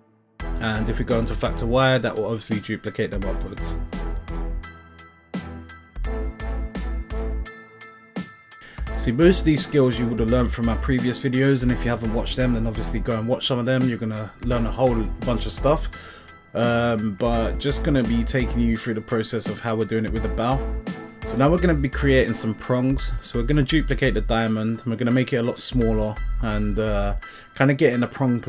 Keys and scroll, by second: 8.2 5, 8.7 Return, 16.9 Tab, 17.7 l, 25.5 Tab, 27.9 s.